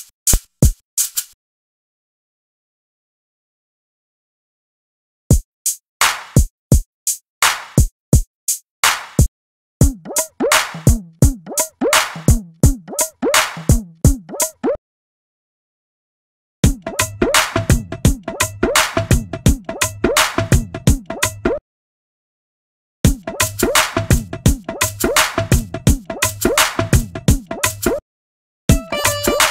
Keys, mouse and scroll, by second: 8.5 click, 22.1 click, 24.8-29.5 drag.